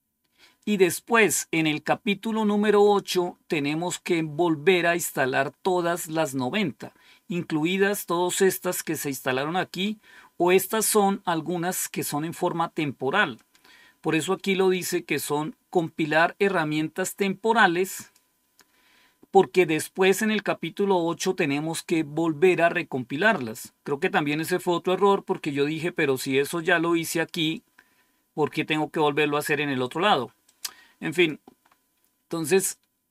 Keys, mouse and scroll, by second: 2.6-4.0 scroll up 1, 4.0-5.4 scroll up 1, 7.6-8.3 scroll down 1, 13.3-15.7 drag, 17.9 click, 27.5-28.9 drag, 30.4 click, 31.1 click, 31.6-33.1 scroll down 1.